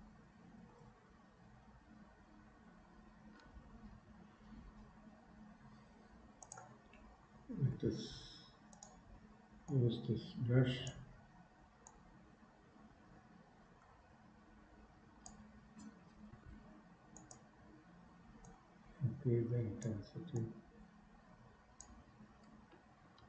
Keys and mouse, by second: 3.9 KP_1, 6.6 right click, 9.8-11.1 right drag, 11.9-15.3 drag, 18.4-20.1 drag, 20.5-22.0 drag.